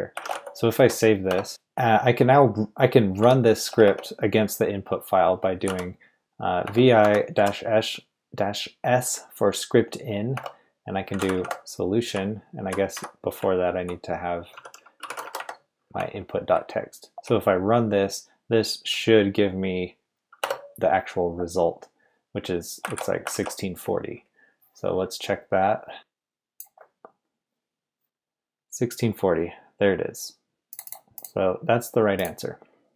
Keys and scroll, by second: 0.0-7.3 typing, 10.3-11.8 typing, 12.1 Left, 12.4 Left, 13.4 Left, 13.4 Right, 14.3-17.2 typing, 20.4 Return, 22.9 shift+v, 23.3 shift+v.